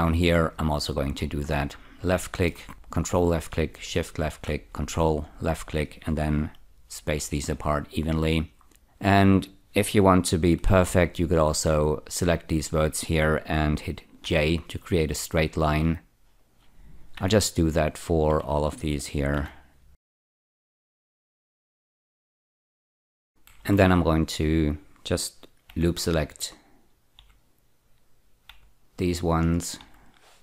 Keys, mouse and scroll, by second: 0.7 click, 1.3 scroll down 1, 2.3 shift+middle click, 3.0 ctrl+click, 3.9 shift+click, 5.4 ctrl+click, 7.1 ü, 8.6 scroll up 2, 10.6 1, 11.5 click, 12.3 shift+click, 14.3 j, 15.5 click, 16.4 shift+click, 17.2 j, 18.1 click, 18.7 shift+click, 19.0 click, 19.4-23.7 typing, 19.9 click, 20.1 click, 20.3 click, 20.4 shift+click, 20.6 click, 20.7 shift+click, 20.9 click, 21.0 shift+click, 21.2 click, 21.4 click, 21.5 shift+middle click, 21.7 scroll up 3, 21.8 click, 21.9 shift+click, 22.1 click, 22.3 click, 22.5 click, 22.6 shift+click, 22.9 scroll up 2, 25.7 ä, 27.2 ä, 28.5 ä, 29.8 ä.